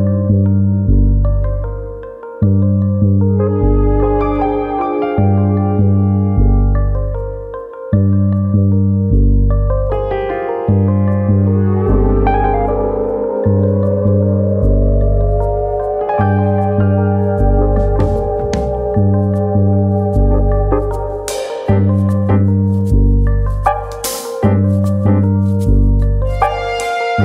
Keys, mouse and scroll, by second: 0.4 shift+click, 0.9 click, 2.8 click, 2.9 shift+click, 4.8 click, 5.2 middle click, 5.7 click, 6.5 middle click, 7.4 3, 7.5 click, 7.8 middle click, 8.4 click, 14.0 middle click, 14.7 click, 15.4 shift+click, 15.6 middle click, 16.2 click, 18.5 middle click, 18.9-19.5 scroll down 2, 19.2 middle click, 19.5 middle click, 19.5 scroll up 1, 20.2 Tab, 20.6 Tab, 21.4 click, 21.8 click, 23.1 middle click, 23.4-24.0 scroll down 3, 23.6 middle click, 25.1 KP_1, 26.3 middle click, 27.1 KP_3.